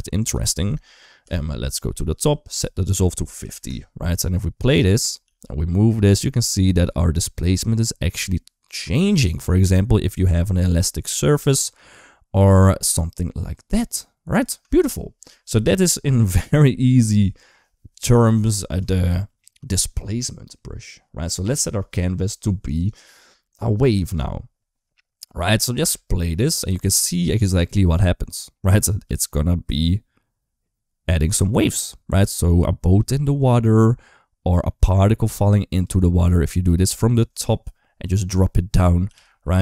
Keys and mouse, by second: 1.0 KP_7, 2.4-3.4 drag, 4.5 click, 4.8 space, 5.1 g, 14.3 space, 18.1 click, 21.1 click, 22.6-24.0 drag, 25.7 space, 27.4 click, 28.9 g, 37.5 middle click, 38.3 middle click, 38.9 g.